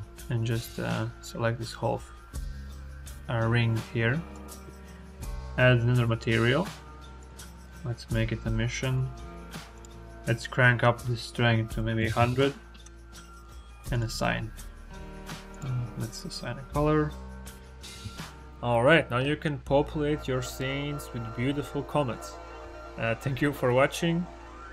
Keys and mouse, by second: 6.0 click, 7.0 click, 8.0 click, 9.6-12.7 drag, 12.1 KP_0, 17.8 Tab, 18.1 space.